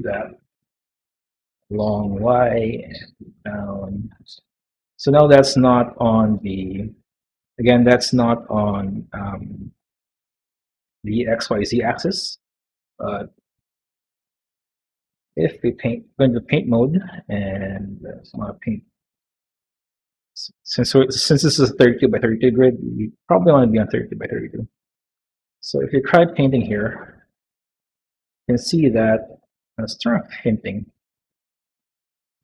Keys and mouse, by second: 3.1 g, 4.3-5.4 middle drag, 6.1 middle click, 7.1 middle click, 8.3-10.5 middle drag, 10.9 middle click, 12.3-13.6 middle drag, 13.6 g, 15.6 click, 19.9 click, 21.1 middle click, 24.7 middle click, 26.8 shift+middle click, 28.5 middle click, 29.0 shift+middle click, 30.4 click, 32.0 middle click.